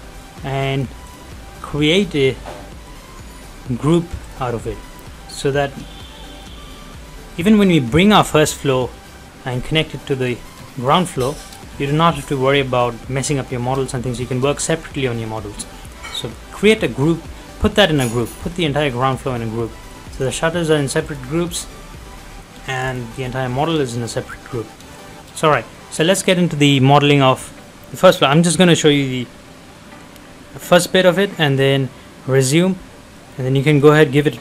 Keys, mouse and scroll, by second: 1.1 right click, 4.2 click, 4.7-5.7 scroll up 1, 5.7 middle click, 6.3 shift+middle click, 10.0 middle click, 10.8 scroll down 1, 11.1 middle click, 13.6 middle click, 17.4-18.1 scroll up 1, 18.1-18.5 scroll down 1, 19.5 middle click, 20.0 scroll up 1, 20.2 click, 22.0 middle click, 22.3-22.7 scroll up 1, 22.9 click, 23.3 scroll down 1, 23.5 middle click, 24.3 scroll down 1, 24.6 middle click, 25.1 shift+middle click, 33.2 middle click, 33.6 shift+middle click, 33.9-34.2 scroll up 1.